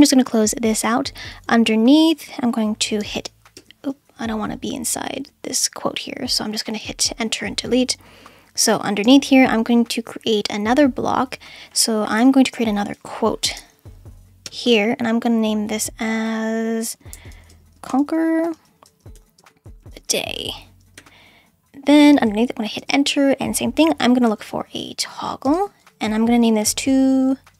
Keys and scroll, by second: 3.0 Return, 3.9 BackSpace, 9.0 Return, 12.2-14.2 typing, 14.4 Return, 16.9-21.0 typing, 22.8 Return, 23.5-25.0 typing, 25.1 Down, 25.4 Return, 26.2-27.5 typing.